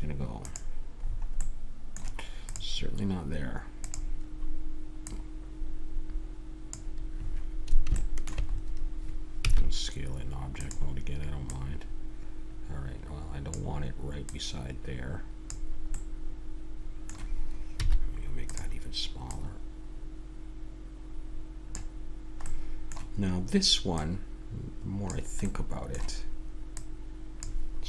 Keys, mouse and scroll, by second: 1.0-3.3 middle drag, 3.3 click, 8.0-10.4 middle drag, 9.5 s, 11.4-13.2 drag, 14.3-15.9 drag, 15.9-17.8 middle drag, 17.8 s, 19.2-21.1 drag, 22.4-23.8 middle drag, 24.0-25.6 drag, 25.6 middle click, 26.7 click.